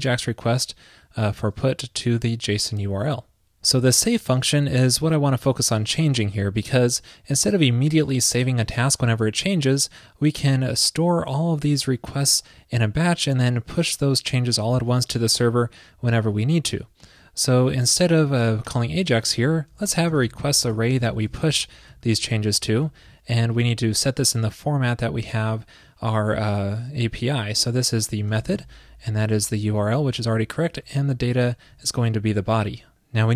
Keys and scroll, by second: 22.2 alt+Left, 22.2 alt+Left, 22.7 alt+shift+Left, 30.8 alt+shift+Left.